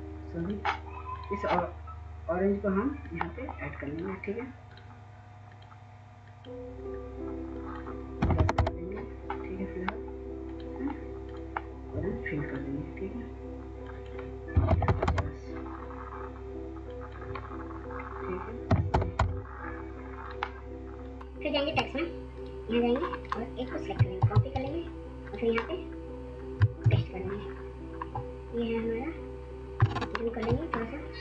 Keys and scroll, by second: 8.2 typing, 8.5 Return, 14.5-14.9 typing, 15.1 Return, 18.5-19.2 typing, 19.2 Return, 23.9 ctrl+c, 26.5 ctrl+v, 29.6 ctrl+space, 29.9 ctrl+v, 29.9 ctrl+space, 30.1 ctrl+space.